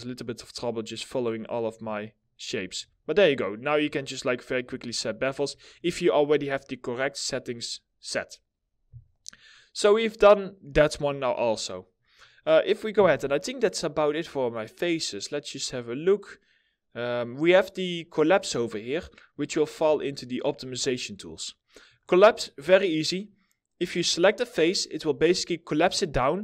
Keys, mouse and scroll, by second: 1.7 right click, 2.5 alt+middle click, 4.4 alt+middle click, 8.8 middle click, 12.4 4, 18.8 middle click, 19.2 scroll down 1, 19.5 alt+middle click, 20.4 middle click, 21.9 scroll up 1.